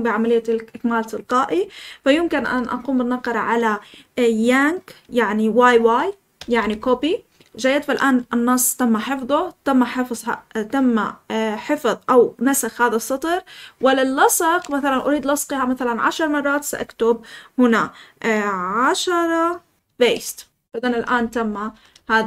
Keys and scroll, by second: 6.3 typing, 19.8-20.1 typing, 21.2-22.2 typing.